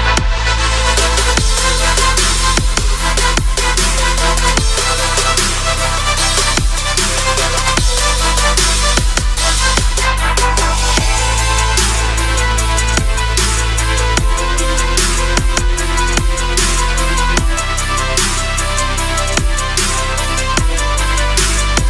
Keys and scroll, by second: 2.7 Return.